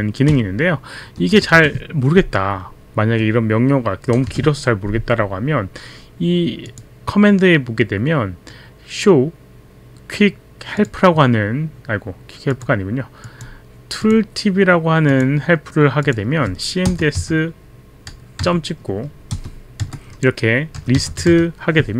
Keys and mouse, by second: 6.7 click, 10.8 click, 12.4 click, 13.2 click, 14.0 click, 15.1 click, 16.1 click, 16.9 click, 17.2 s, 20.5-21.9 typing.